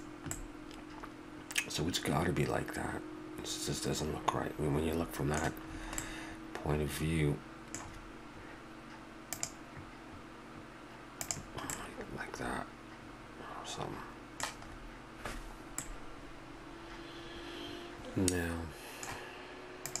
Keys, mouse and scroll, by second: 0.3-1.6 middle drag, 2.0-3.0 middle drag, 4.0 middle drag, 5.0-7.8 middle drag, 11.7-13.4 middle drag, 14.7-17.4 middle drag, 18.4-20.0 middle drag.